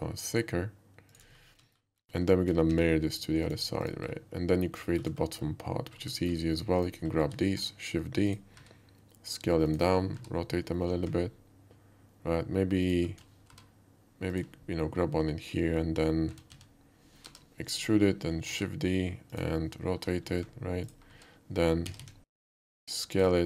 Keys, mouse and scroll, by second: 1.1 shift+click, 1.3 shift+middle click, 1.5 shift+middle click, 1.7 alt+middle click, 2.1 alt+middle click, 2.7 alt+x, 3.5 click, 3.8 click, 4.9 shift+middle drag, 5.2 shift+middle click, 5.4 shift+middle drag, 6.2 shift+middle click, 6.8 shift+click, 7.6 shift+d, 8.3 click, 8.6 s, 9.7 click, 9.9 middle click, 10.2 r, 12.8 ctrl+click, 13.5 g, 14.3 click, 16.3 s, 16.5 x, 17.3 y, 17.8 click, 18.5 shift+d, 19.3 click, 20.0 r, 20.9 click, 21.1 s, 21.9 z, 22.0 z, 23.2 click, 23.3 z.